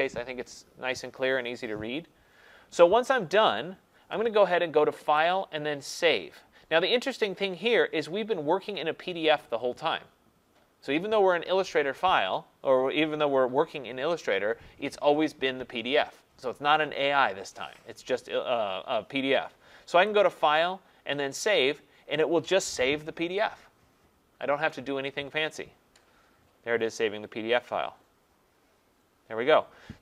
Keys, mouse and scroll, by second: 3.0-3.7 scroll, 5.2 click, 5.2 scroll, 5.3-7.0 scroll down 1, 20.3 click, 21.6 click.